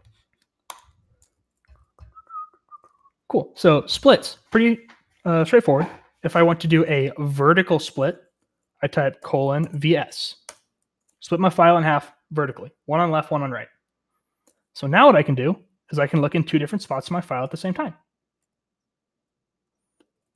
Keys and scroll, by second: 1.8-3.0 typing, 9.3-10.1 typing, 10.4 Return, 14.8-20.3 typing.